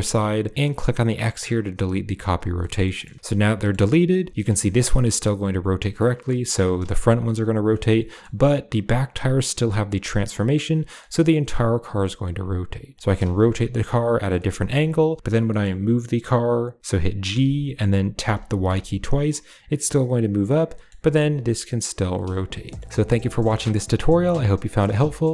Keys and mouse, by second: 1.6 click, 2.4 shift+middle click, 2.7 middle drag, 2.8 click, 3.2 click, 3.4 click, 3.4 middle click, 4.1 r, 5.8 middle click, 5.9 click, 6.1 middle click, 6.4 r, 7.7-8.1 drag, 8.7 click, 10.4 click, 10.6 g, 12.9 middle click, 13.0 r, 14.2 middle drag, 14.5 r, 15.3 middle click, 17.1 g, 20.4 click, 20.6 middle drag, 20.9 r, 22.3 shift+click, 22.5 middle drag, 23.2-25.2 middle drag.